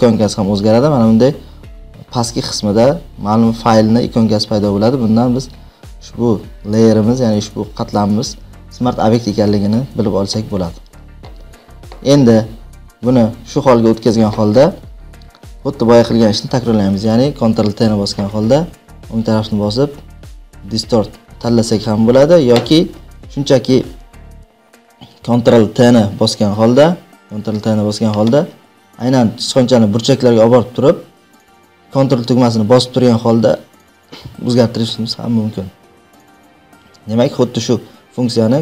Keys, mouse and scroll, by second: 17.5 ctrl+t, 19.2-21.2 right drag, 21.7-24.5 drag, 27.1 click, 27.4 ctrl+t.